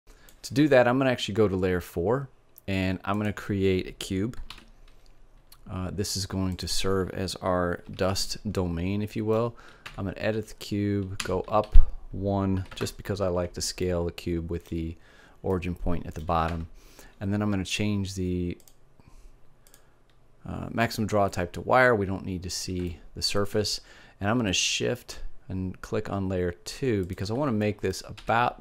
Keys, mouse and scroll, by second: 3.1-4.9 drag, 4.4 shift+a, 8.5-10.4 middle drag, 9.8 Tab, 11.2 g, 16.4 Tab, 18.6-20.4 drag, 20.4 middle click, 25.4-27.0 middle drag, 27.0-28.6 drag, 28.2 s.